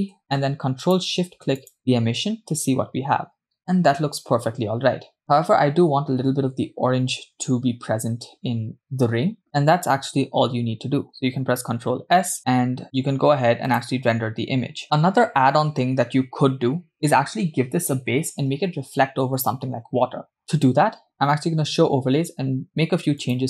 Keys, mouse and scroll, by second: 1.2 click, 3.4 scroll down 2, 3.6 click, 4.3-4.7 scroll down 1, 12.4 ctrl+s, 13.7-14.8 drag, 14.8 ctrl+z, 21.3 click.